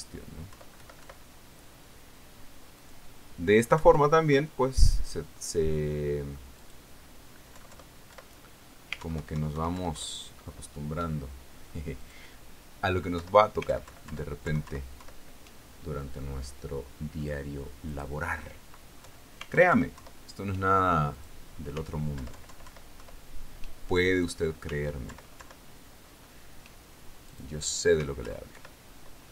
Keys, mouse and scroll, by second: 1.1 click, 2.0 BackSpace, 4.3 click, 5.2 BackSpace, 7.1 click, 9.0 BackSpace, 10.5 alt+Right, 11.2 alt+Left, 13.5-13.9 drag, 14.7 Left, 17.7-19.1 middle drag, 19.1 scroll up 1, 19.4 click, 19.7-20.5 scroll up 1, 20.5 Left, 20.5-22.1 scroll up 1, 22.1-22.6 alt+scroll up 1, 22.6 click, 23.7 alt+Left, 25.6 click, 26.6 alt+Left, 28.8 click.